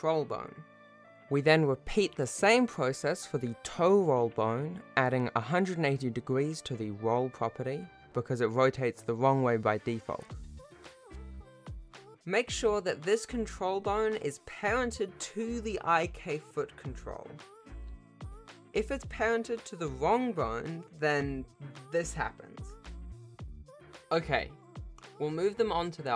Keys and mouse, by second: 1.4 ctrl+s, 2.6 shift+click, 5.2 Tab, 6.1-7.6 drag, 9.3 ctrl+Tab, 11.8 shift+click, 12.8 Tab, 12.8 r, 13.8 alt+p, 16.1 ctrl+Tab, 17.5 r, 20.8 r, 21.1 click, 21.4 r, 23.6 alt+a, 23.6 c, 25.6 m.